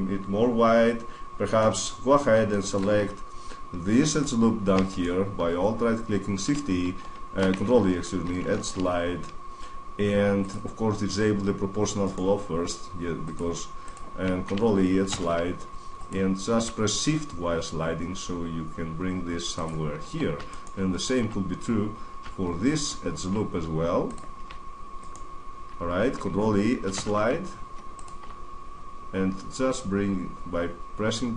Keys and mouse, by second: 0.3-1.6 middle drag, 1.6 middle click, 5.4 middle click, 5.6 middle click, 8.3 ctrl+e, 11.9-13.7 right drag, 13.7-15.2 drag, 14.8 ctrl+e, 19.4-20.2 drag, 20.2-22.5 middle drag, 22.5-24.8 drag, 24.8-26.4 middle drag, 26.4 click, 26.7 ctrl+e.